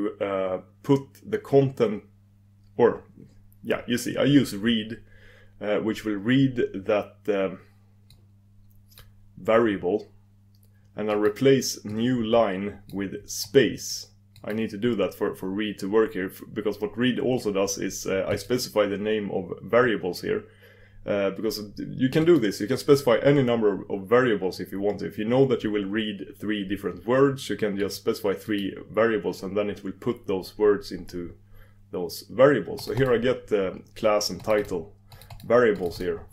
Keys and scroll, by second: 8.1 super+s.